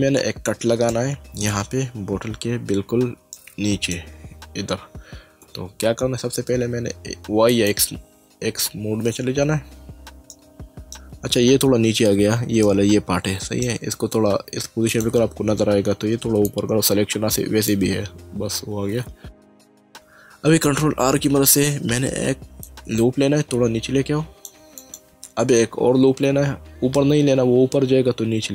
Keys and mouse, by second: 0.9 middle click, 2.6 Caps_Lock, 3.3 middle click, 5.4 Tab, 7.5 click, 10.3 middle click, 12.7 middle click, 14.9 click, 16.4 click, 19.5 shift+middle click, 21.0 ctrl+r, 22.7 click, 24.8 click, 26.2 ctrl+r.